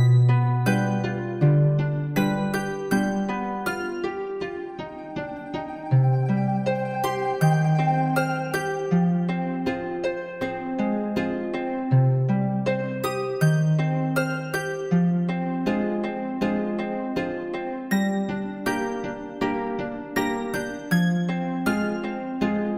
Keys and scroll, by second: 17.6 [.